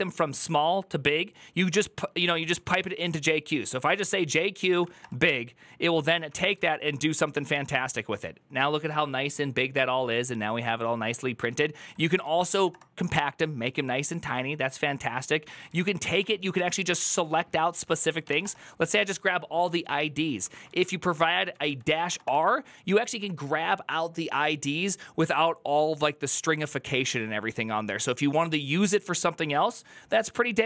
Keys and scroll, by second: 2.1-3.0 typing, 4.3-5.2 typing, 6.1 Up, 6.4 ctrl+Left, 6.8-7.6 typing, 11.6 ctrl+Left, 11.9-12.8 typing, 15.1 Up, 15.3 ctrl+Left, 15.5-16.6 typing, 17.8-18.6 typing, 20.2 Up, 20.5 ctrl+Left, 20.7 ctrl+Left, 21.1 Right, 21.3 Right, 21.4-22.3 typing.